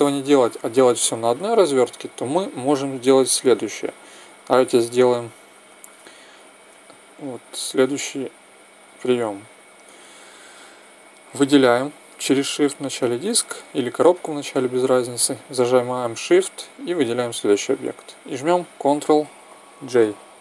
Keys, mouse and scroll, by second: 2.6-4.6 right drag, 9.4-11.3 right drag, 12.6-14.4 right drag, 16.4-18.3 right drag, 19.7 ctrl+j.